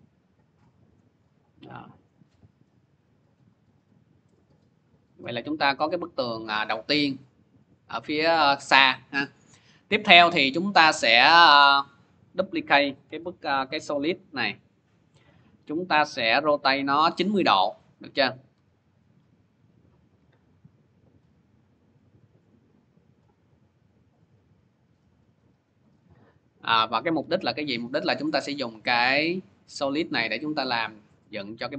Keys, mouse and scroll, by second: 0.8 click, 4.3 click, 4.8 middle click, 9.7 middle click, 10.5 middle click, 12.2 click, 12.8 click, 12.8 scroll, 13.6 ctrl+d, 16.0 w, 17.4-18.4 typing, 25.7 click, 27.0 v, 29.8 click.